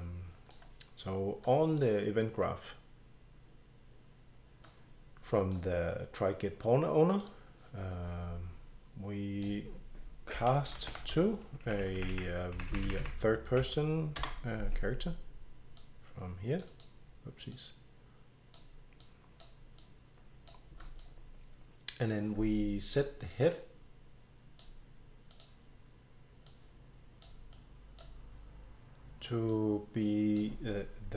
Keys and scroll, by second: 10.1-11.6 typing, 12.0 Up, 12.6 Up, 12.7 Down, 12.9 Down, 13.0 Down, 13.6 Down, 14.2 Return, 17.7 BackSpace.